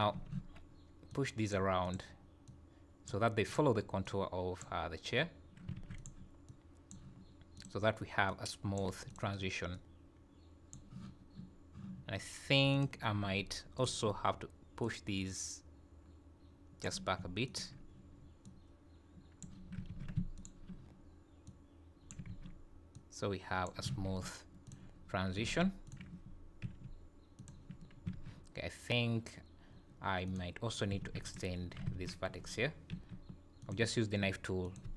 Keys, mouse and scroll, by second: 0.1 z, 1.1 click, 1.8 click, 2.5 click, 3.5 click, 4.0 click, 5.8 alt+a, 6.0 click, 6.5 click, 7.6 click, 8.3 click, 9.1 click, 9.7 click, 12.7 click, 13.8 alt+click, 14.8 click, 17.5 alt+click, 18.4 click, 19.9 ctrl+z, 20.4 shift+click, 21.5 click, 22.3 ctrl+z, 22.9 click, 23.9 alt+a, 24.6 click, 25.5 alt+a, 25.8 click, 26.6 g, 28.1 alt+a, 30.3 click, 31.0 alt+a, 31.2 click, 31.9 alt+a, 32.9 k.